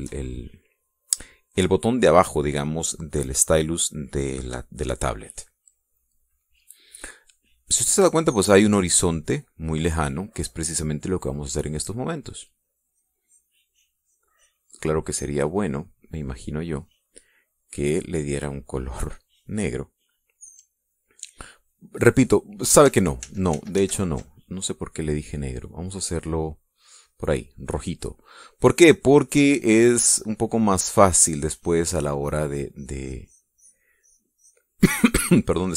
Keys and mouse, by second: 1.8 click, 7.1 middle click, 7.3 click, 13.0 click, 13.5-14.6 drag, 18.5 click, 19.6 click, 22.2-23.4 drag, 24.2 ctrl+z, 26.4-28.0 drag, 29.6-32.2 drag, 33.2-34.9 drag.